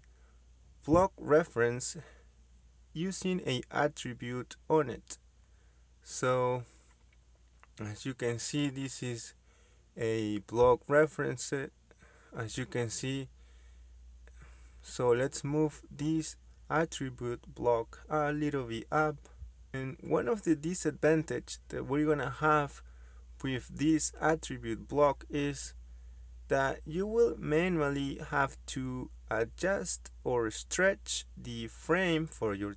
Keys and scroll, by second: 13.2 Escape, 16.3 m, 16.5 space, 24.5 Escape, 24.9 Escape, 26.4 m, 26.5 space.